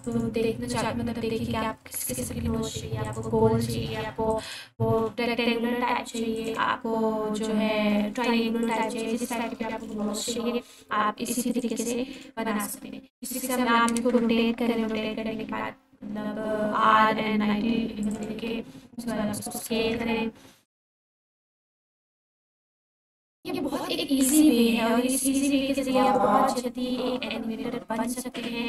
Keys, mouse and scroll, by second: 3.1 click, 4.8 s, 6.4 click, 7.5-8.5 typing, 8.6 click, 9.7 shift+d, 11.5 click, 12.0 r, 13.1-15.5 typing, 14.0 Return, 18.0 click, 18.5-19.5 typing, 20.6 right click, 21.6 shift+d, 25.9 click.